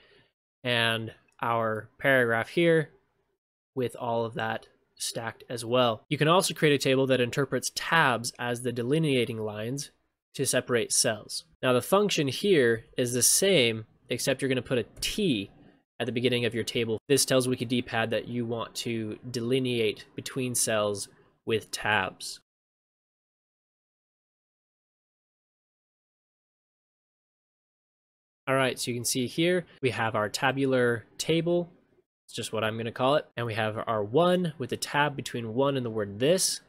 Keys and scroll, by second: 26.2 ctrl+shift+space, 26.9 ctrl+shift+space.